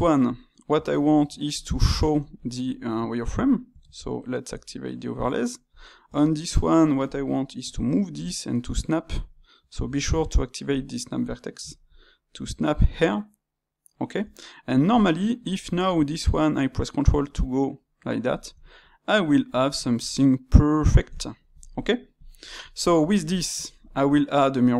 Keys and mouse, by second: 0.2 click, 2.3-3.8 ctrl+middle drag, 3.8 shift+', 5.7 click, 6.0 Tab, 9.8 shift+Tab, 11.6 g, 14.9 click, 15.4 q, 18.0-24.7 middle drag.